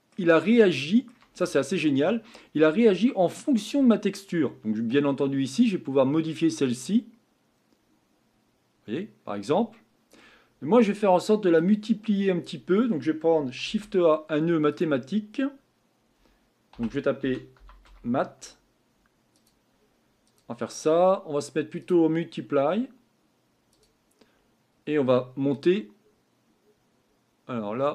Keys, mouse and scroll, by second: 0.4-0.8 scroll down 1, 0.8-6.0 shift+middle drag, 6.0-8.7 drag, 23.8-27.9 drag.